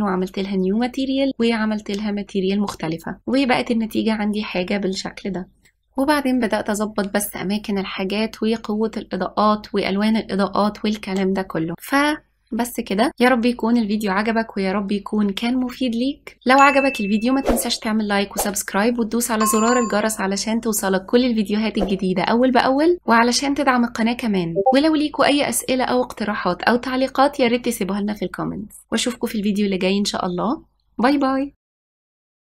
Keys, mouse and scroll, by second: 2.2-3.3 drag, 3.5-5.7 drag, 6.7 g, 10.0 click, 12.4 click, 13.0-14.0 drag, 14.0 KP_0, 16.2 click, 18.8 click, 22.7 click, 22.9 click, 25.1 click, 25.4 click, 25.7 click, 26.5 click, 29.2 Left, 29.9 g, 31.2 g.